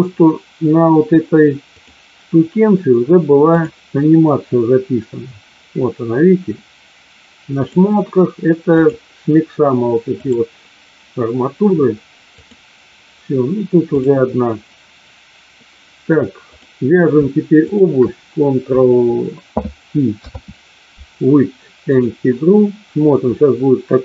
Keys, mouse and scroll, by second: 3.5 click, 8.7 click, 10.2 click, 12.4 click, 16.4 click, 17.6 shift+click, 20.1 ctrl+p, 23.2 click.